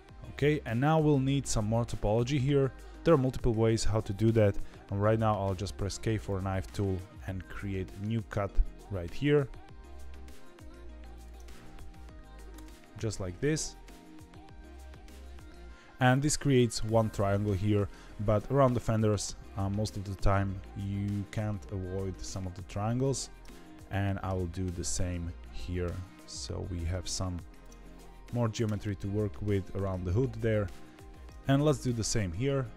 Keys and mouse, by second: 5.4 k, 24.2 k, 31.9 k.